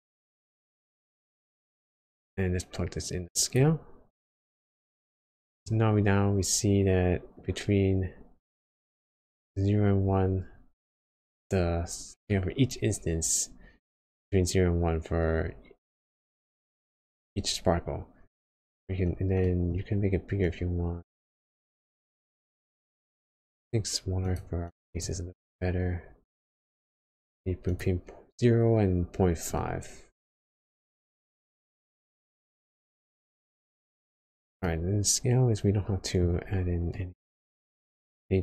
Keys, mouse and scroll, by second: 5.0 middle click, 5.8-6.3 scroll up 1, 7.1-7.4 scroll up 1, 12.2 middle click, 18.3-18.8 scroll up 5, 18.9-19.3 scroll down 2, 19.4 middle click, 20.4 click, 24.7-29.5 click, 29.5 middle click, 33.5 scroll down 1, 33.5-34.1 scroll down 4, 34.5 scroll down 1, 34.6 middle click, 36.9 middle click, 37.7-38.1 scroll up 1.